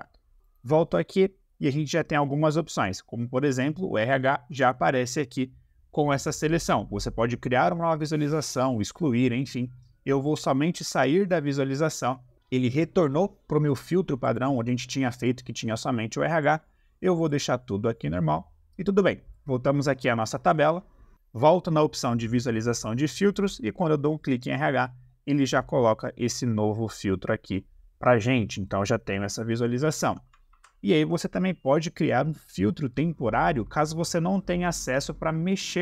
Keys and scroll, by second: 30.4 ctrl+z.